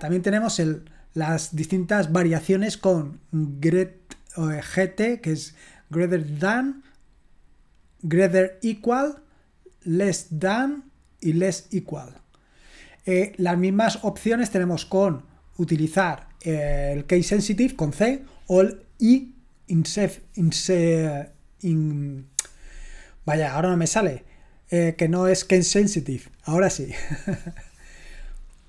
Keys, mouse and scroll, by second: 0.5-4.4 scroll down 1, 4.4-7.8 scroll down 1, 7.8-9.8 scroll down 1, 9.8-11.9 scroll down 1, 11.9-15.1 scroll down 1, 15.1-16.8 scroll down 1, 16.8-17.9 scroll down 1, 17.9-24.5 scroll down 1, 24.5-28.2 scroll down 1, 28.2-28.6 scroll down 1.